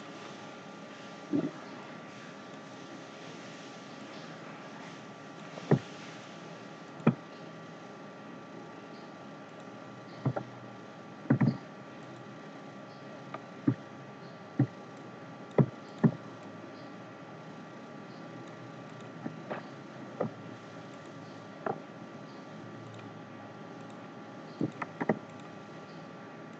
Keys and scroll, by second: 11.3 ctrl+z.